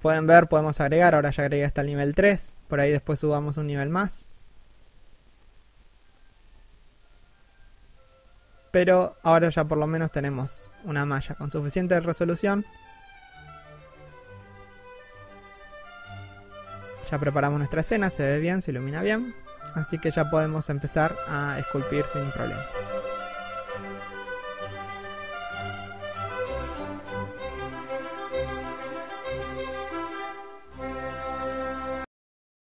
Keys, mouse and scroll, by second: 3.3 middle click, 3.6 scroll up 1, 5.0 scroll down 1, 9.5 1, 10.1 scroll down 1, 10.7 scroll up 1.